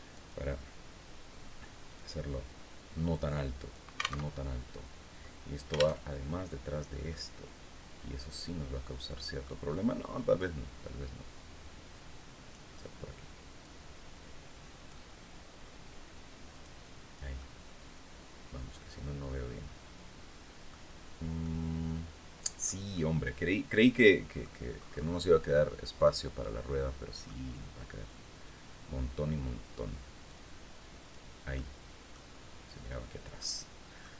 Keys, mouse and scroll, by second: 1.4-3.4 drag, 3.7 alt+Tab, 5.5 alt+Tab, 6.6-9.1 drag, 9.9-12.2 drag, 13.1-14.6 drag, 16.0 click, 16.9-20.3 middle drag, 20.6-20.9 scroll down 1, 20.9-22.3 middle drag, 22.4-24.1 middle drag, 24.2-24.7 scroll up 1, 25.0-26.9 drag, 29.8-30.8 drag, 31.0 click, 32.9 click, 33.8 scroll up 1.